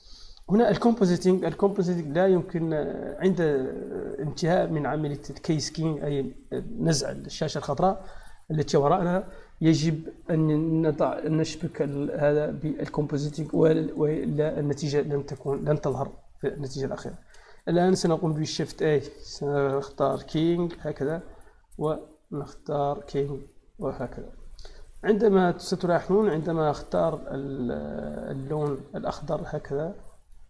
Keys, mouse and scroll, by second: 11.7-15.0 drag, 17.5 click, 17.8 shift+a, 18.6 click, 19.6 k, 20.3 e, 20.6 y, 22.9 click, 23.8 click, 25.8 click, 28.4 click, 30.1 click.